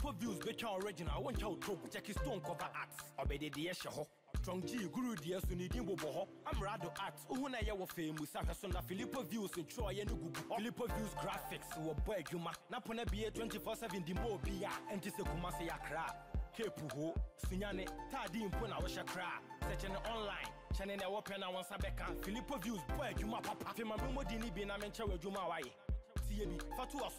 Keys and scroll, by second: 19.6 ctrl+=, 21.5 Return, 24.6 ctrl+=, 26.0 ctrl+=.